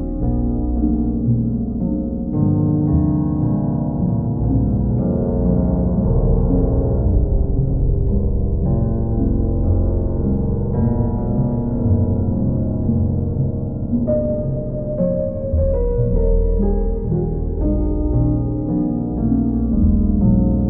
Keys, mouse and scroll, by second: 0.4 click, 0.9 click, 1.3 shift+click, 1.9 alt+click, 3.1 click, 4.2-5.2 right drag, 6.3-7.3 drag, 9.4 click, 11.5 click, 13.4 click, 13.5 shift+click, 15.8 click, 16.6 click, 17.1 shift+click, 20.5 click.